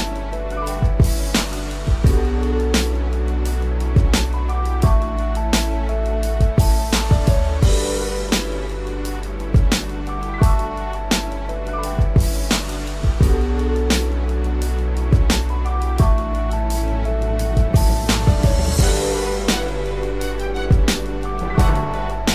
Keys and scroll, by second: 21.2 ctrl+0.